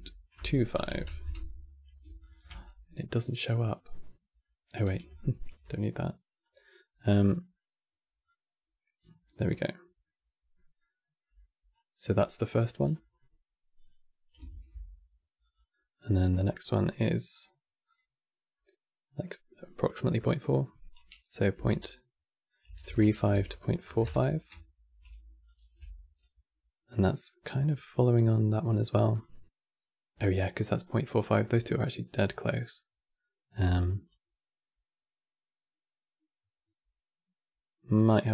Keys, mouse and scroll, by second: 1.9 ctrl+shift+click, 2.3 click, 3.1 scroll down 5, 3.3-4.8 middle drag, 4.8 alt+click, 5.3 x, 6.1 click, 7.1 middle click, 7.9 click, 8.9-11.4 middle drag, 11.4 click, 12.1 middle click, 12.5 scroll down 4, 12.7 middle click, 13.5 click, 14.2 ctrl+shift+d, 15.4-17.0 middle drag, 17.0-17.6 drag, 18.8 middle click, 19.3-19.9 scroll up 5, 19.9-22.9 drag, 25.2 ctrl+shift+click, 26.9-28.4 middle drag, 28.4-28.9 drag, 30.5 click, 30.9 scroll down 2, 31.1 middle click, 32.0-33.5 scroll up 7, 33.5-36.5 shift+drag.